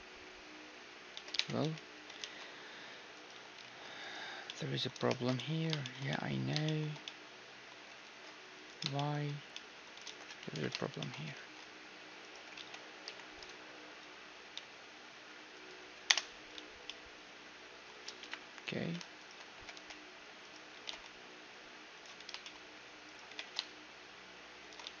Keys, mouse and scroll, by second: 1.2 z, 1.4 Tab, 1.6 z, 2.2 ctrl+r, 3.3-6.1 right drag, 3.3 z, 3.7 ctrl+r, 4.5-8.5 middle drag, 5.1 shift+space, 8.0 ctrl+r, 10.1 ctrl+z, 10.5 KP_1, 11.4 ctrl+r, 12.3 click, 12.3 middle click, 12.6 z, 13.0-14.6 right drag, 13.0 k, 16.6 z, 16.9-19.2 middle drag, 18.2 KP_1, 19.2-21.5 right drag, 19.6 g, 20.8 g, 22.2 middle click, 23.1-24.3 drag, 23.1-25.0 right drag, 23.3 g, 24.9 z.